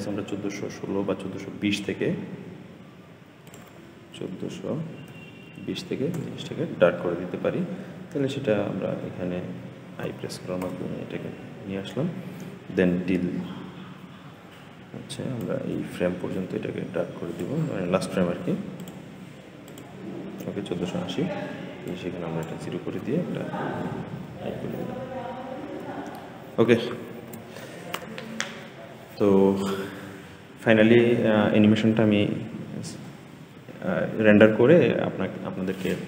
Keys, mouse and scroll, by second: 3.3-6.5 drag, 15.3-18.4 drag, 18.7-24.0 drag, 24.0 i, 25.7 i, 27.0 ctrl+s.